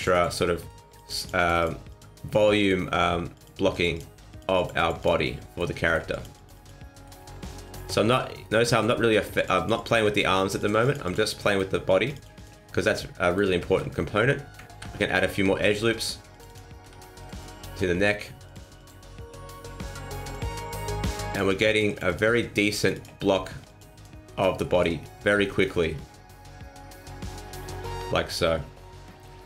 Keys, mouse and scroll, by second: 0.1 click, 0.3 middle click, 0.9 click, 1.1 click, 1.3 click, 1.5 click, 1.9 click, 2.5 middle click, 2.9 scroll up 2, 3.3 click, 3.7 click, 3.9 click, 4.3 click, 4.5 click, 4.7 click, 5.0 click, 5.2 middle click, 5.7 shift+middle click, 6.1 click, 6.3 click, 6.5 click, 6.9 middle click, 7.1 shift+middle click, 7.6 click, 7.8 click, 8.1 middle click, 8.6 shift+middle click, 8.9 middle click, 9.3 click, 9.5 click, 9.7 click, 10.1 middle click, 10.5 click, 10.8 click, 11.0 click, 11.3 middle click, 12.1 click, 12.3 click, 12.6 scroll down 2, 12.8 middle click, 13.6 shift+middle click, 13.9 scroll up 3, 14.1 Tab, 14.7 ctrl+e, 15.5 ctrl+r, 16.9 ctrl+r, 18.4 click, 18.7 click, 20.2 click, 20.8 middle click, 21.3 click, 21.4 click, 21.6 click, 21.8 click, 22.0 click, 22.3 middle click, 22.7 click, 22.9 click, 23.1 middle click, 23.6 click, 23.9 click, 24.3 middle click, 24.4 scroll down 2, 24.6 middle click, 24.9 scroll down 2, 25.1 middle click, 25.4 shift+middle click, 25.8 scroll down 1, 26.0 middle click, 29.3 scroll up 2.